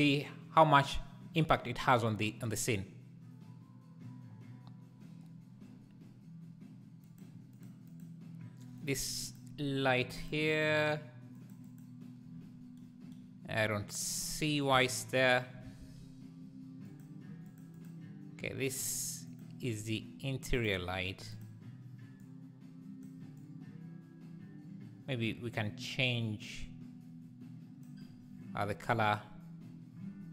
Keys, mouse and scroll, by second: 7.1 click, 7.6 click, 7.9 click, 8.8 click, 9.3 click, 10.2 click, 10.5 click, 11.4 Left, 11.4 click, 11.7 Left, 11.7 click, 14.3 Left, 14.7 x, 16.9 Left, 16.9 click, 17.5 click, 17.8 click, 19.4 click, 21.3 click.